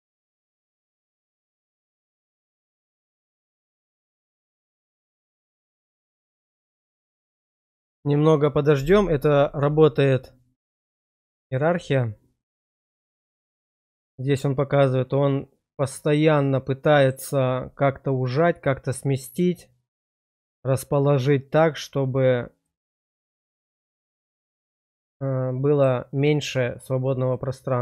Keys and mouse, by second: 4.8 middle click, 6.5-7.7 middle drag, 15.8-17.1 drag, 22.6-24.2 drag, 24.9 middle click, 27.3 middle click.